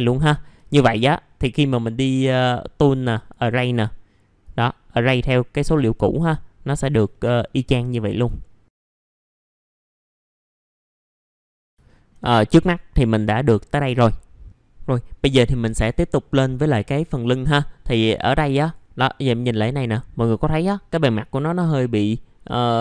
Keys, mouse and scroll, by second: 0.1 alt+middle click, 0.7 F3, 0.9 middle click, 2.2 click, 7.1 alt+middle click, 8.4 alt+middle click, 8.7 click, 8.8 F4, 9.1 scroll down 1, 9.4 scroll up 1, 9.5 click, 9.8-10.3 scroll down 1, 10.3 click, 10.8 alt+middle click, 11.2 alt+middle click, 11.5 alt+middle click, 11.8 alt+middle click, 12.4 click, 14.4 ctrl+r, 18.1-18.6 scroll up 1, 18.6 click, 19.1 middle click, 19.6-20.8 scroll up 1, 20.8 scroll down 1.